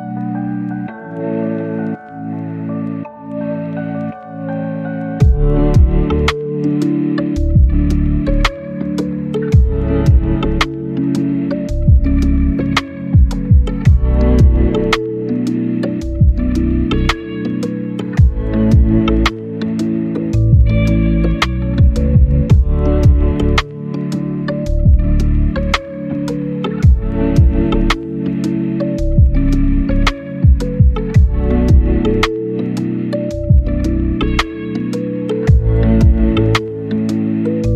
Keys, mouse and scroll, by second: 1.6 scroll down 1, 1.8-2.8 scroll up 3, 1.9 right click, 2.4 right click, 2.8 right click, 3.0-6.7 drag, 7.0 scroll down 1, 7.1 scroll up 1, 7.2 click, 10.0-10.5 scroll up 1, 10.5 click, 11.7 click, 13.4-14.0 scroll up 1, 14.0 click, 14.7 right click, 15.5 scroll down 1, 15.7 scroll up 1, 15.8 right click, 15.9 click, 20.5 right click, 20.9-27.8 drag, 27.8 click, 28.8 click, 29.3 middle click, 29.6 click, 29.8 right click, 30.6 scroll down 1, 30.7-31.1 scroll up 2, 30.8 right click, 31.1 click, 34.6-35.0 scroll up 1, 35.0 click, 35.4 click, 35.7 scroll down 1, 35.8-36.6 scroll up 2, 35.9 right click, 36.6 click, 36.9 scroll down 1, 37.2-37.5 scroll up 1.